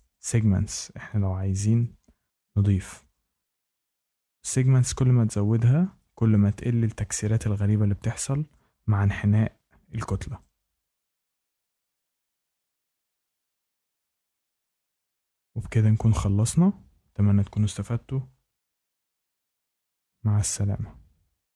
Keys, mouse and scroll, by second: 0.0 click, 2.8 shift+middle click, 4.7 click, 10.3 click, 12.9 Escape, 14.4 Escape, 14.6-15.3 scroll, 18.2-19.4 scroll down 3, 19.5 scroll.